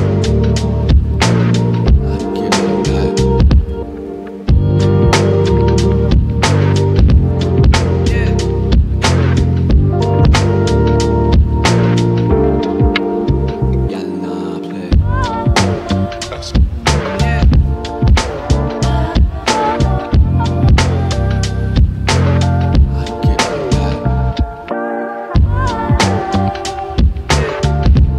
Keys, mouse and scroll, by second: 0.1 right click, 1.3 scroll down 1, 1.7 right click, 2.6 ctrl+z, 3.9 space, 5.4 right click, 7.4 typing, 13.3 right click, 15.5 click, 16.5-16.9 scroll up 1, 17.2 click, 17.8 scroll up 1, 19.1 click, 20.0 scroll up 1, 20.7 click, 22.9 scroll up 1, 23.9 typing, 25.3 click, 25.6 right click, 26.9 scroll down 1.